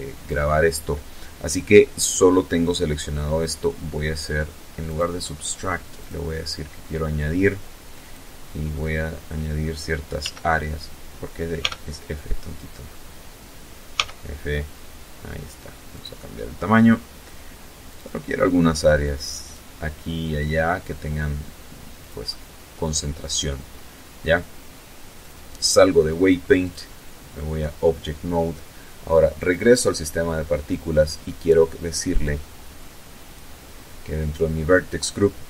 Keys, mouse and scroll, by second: 2.9 click, 4.1 click, 6.1 click, 8.3 d, 9.7 f, 12.0 f, 14.0 click, 16.0 click, 17.5 click, 20.1 click, 23.2 click, 24.7 click, 27.4 click, 28.2-29.6 scroll down 4, 31.3 click, 32.0-32.5 scroll down 2, 33.8 click, 35.1 click.